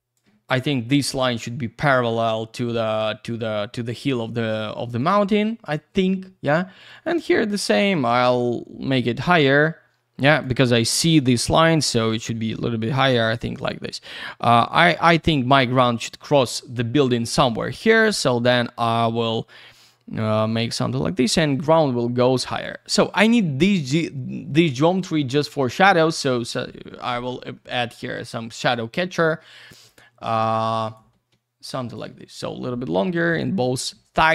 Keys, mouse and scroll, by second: 5.0 click, 5.1 click, 5.2 double click, 6.8 click, 6.9 click, 7.0 double click, 7.9 shift+click, 12.3 middle click, 13.5 click, 17.9 shift+click, 20.5 shift+click, 23.7 click, 23.8 click, 24.0 double click, 25.0 alt+w, 25.8-27.5 scroll down 1, 27.5 middle click, 28.7 shift+click, 30.7 click, 30.8 click, 30.9 double click, 31.7 shift+click.